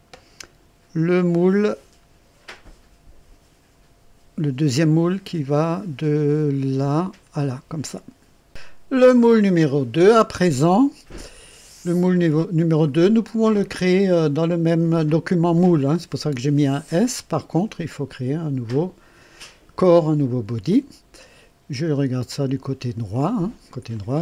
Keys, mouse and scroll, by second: 12.1 click, 17.0 click, 18.7 click, 22.2 click, 23.9 click.